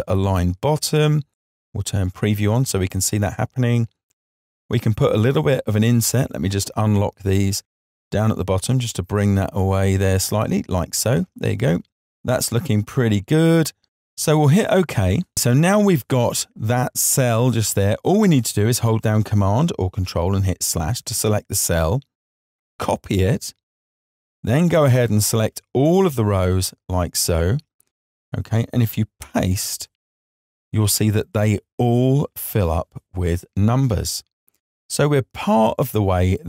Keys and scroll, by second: 19.8 super+/.